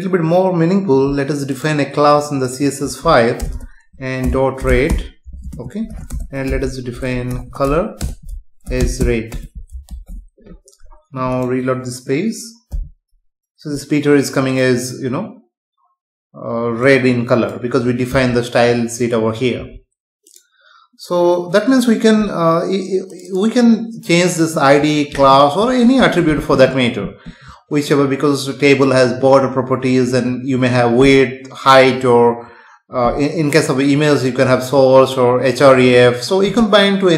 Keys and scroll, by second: 3.4 Return, 5.5 space, 6.1 Return, 9.9 ctrl+s, 12.7 F5.